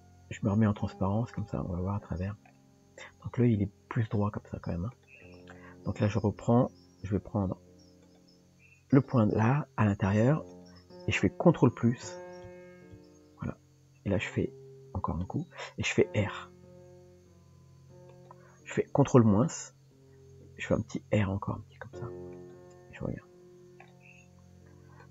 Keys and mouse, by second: 1.5 click, 5.0 click, 6.1 Tab, 8.0 click, 8.9 click, 10.5 click, 16.3 r, 19.5 ctrl+KP_Subtract, 20.9 r, 22.8 Tab.